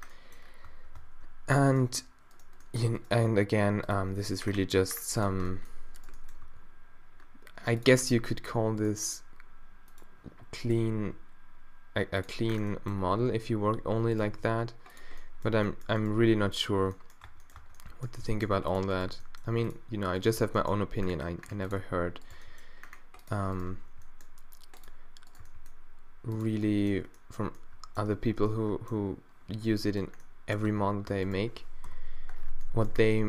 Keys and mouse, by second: 0.7 Tab, 1.0 Tab, 3.3 r, 4.0 g, 6.0-7.1 middle drag, 6.5 r, 8.8 middle click, 10.9 g, 14.2 g, 16.1 g, 17.3 Tab, 17.6 Tab, 17.6 click, 18.2 g, 18.9 click, 19.0 g, 20.3 g, 22.4 g, 23.8 g, 25.4 g, 26.6-28.3 middle drag, 28.3 z, 29.6 z, 30.7 Tab, 31.1 Tab, 31.8 -.